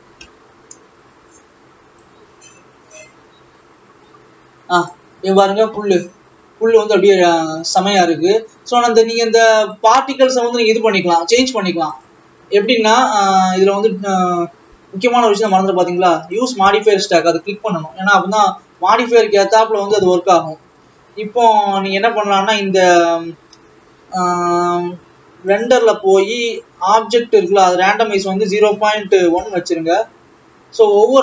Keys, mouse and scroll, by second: 3.3 click, 6.2-6.7 scroll down 2, 8.2-8.7 scroll up 1, 10.7-13.4 drag, 16.9 click, 20.7 scroll down 3.